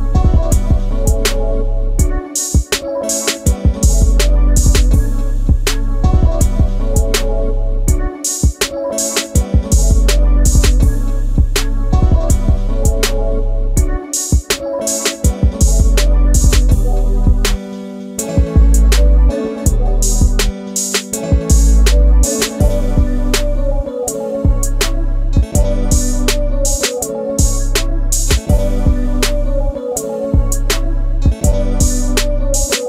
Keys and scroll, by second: 1.3 space, 2.2 m, 8.0 shift+space, 16.9 shift+space, 21.9 m, 25.6 q, 28.1 space.